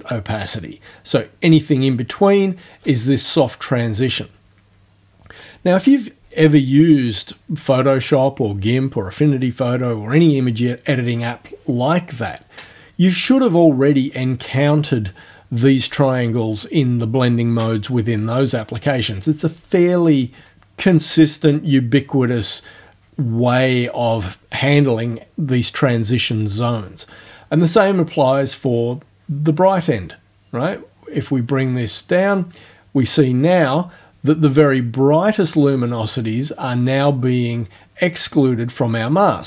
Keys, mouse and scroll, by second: 28.3-39.4 drag.